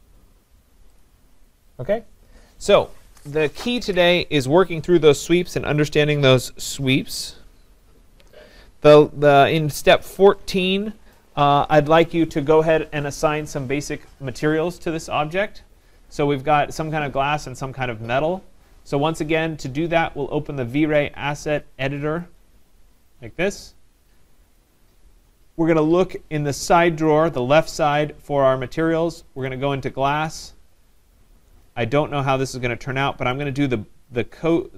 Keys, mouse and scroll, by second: 1.0 click, 3.1 scroll, 22.4 click, 24.6 click, 27.1 click, 29.5 click, 31.1-31.5 scroll, 32.1 scroll, 33.5 click.